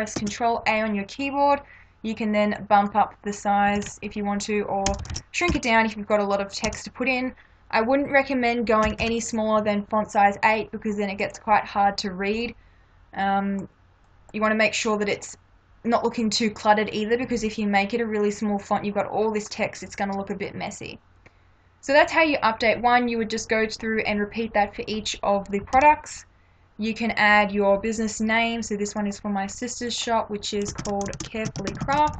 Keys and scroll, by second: 0.2 ctrl+a, 3.7 1, 3.8 3, 4.9 BackSpace, 5.5 8, 6.7 BackSpace, 8.9 1, 14.3 space, 25.8 ctrl+-, 30.8 ctrl+a, 31.2-32.1 typing.